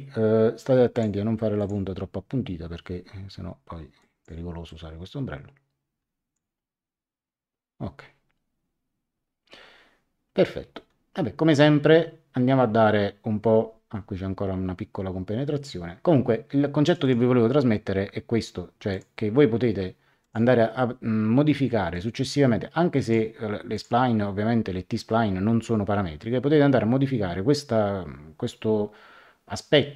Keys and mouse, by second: 0.9 click, 4.0 click, 16.8 click, 18.9 click, 20.2 click, 21.9 click, 23.7 click.